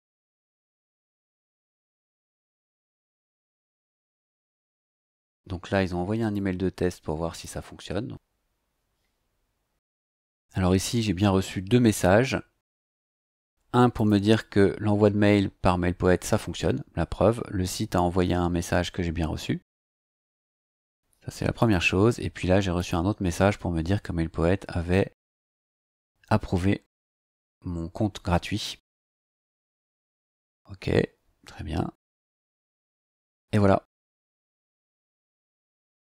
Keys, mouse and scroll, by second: 6.3-7.6 drag, 8.0 click, 14.0 click, 15.6-15.9 scroll down 1, 19.1-19.4 scroll up 1, 19.7 scroll up 1, 21.5 click, 22.7 click, 24.7 scroll down 2, 25.7-28.7 scroll down 2, 28.7 scroll up 2, 29.9 scroll up 2, 30.6 scroll up 2, 31.9 click, 35.5 click.